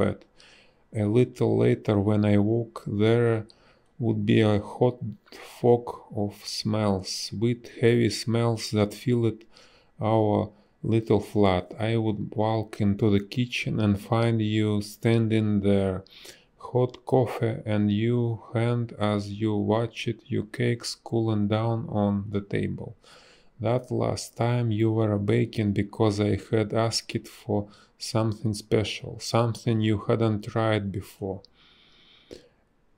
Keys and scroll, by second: 0.6 space, 3.1 a, 5.4 space, 6.3 space, 7.3 space, 14.5 b, 14.9 space, 17.0 space, 23.9 space, 30.6 ctrl+z.